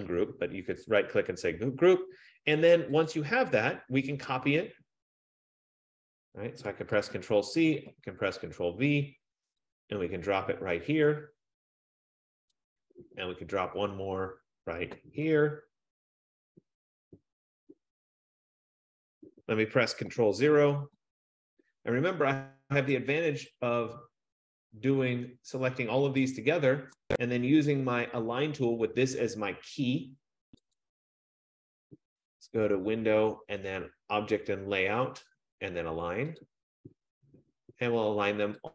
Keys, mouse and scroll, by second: 0.7 F15, 1.0 click, 3.3 click, 4.5-5.0 scroll, 5.3-5.7 scroll, 7.1 ctrl+c, 7.9 ctrl+v, 12.6 click, 13.7-14.8 scroll, 15.5 ctrl+v, 19.3 click, 20.7 ctrl+0, 24.2 shift+click, 27.0 shift+click, 27.8 click, 31.3 click, 36.5 click.